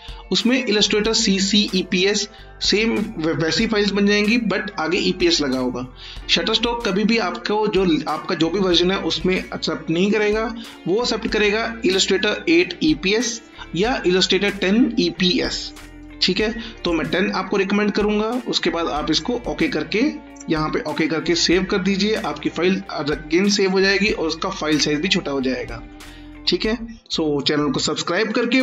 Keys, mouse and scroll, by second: 0.7 click, 16.8 click.